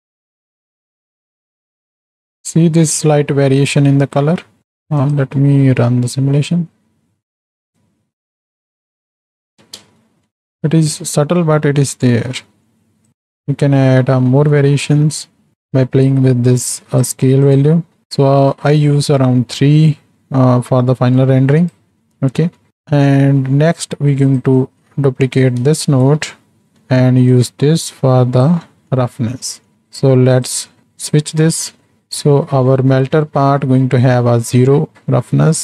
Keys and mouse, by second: 0.2 click, 0.7 click, 1.0 click, 1.4 click, 5.1 click, 6.1 space, 9.5 space, 10.0 shift+middle click, 12.6 middle click, 13.1-17.1 drag, 17.5 click, 20.2 middle click, 21.4-21.8 right drag, 22.0 middle click, 22.5 middle click, 23.0 middle click, 23.6 middle click, 24.3 click, 24.7-25.7 drag, 25.9 ctrl+shift+d, 27.3-28.8 drag, 28.8 middle click, 29.4 middle click, 30.3-31.2 drag, 31.7 middle click.